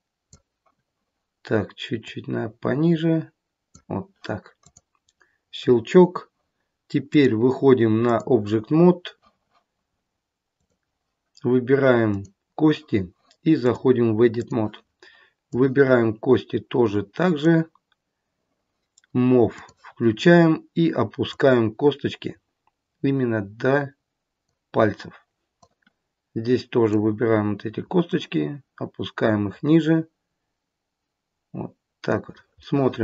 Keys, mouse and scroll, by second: 2.0 click, 4.6 click, 7.0 click, 10.6 click, 12.1 click, 13.5 click, 15.4 click, 19.5 click, 21.2 click, 25.5 click, 28.0 click, 32.5 middle click.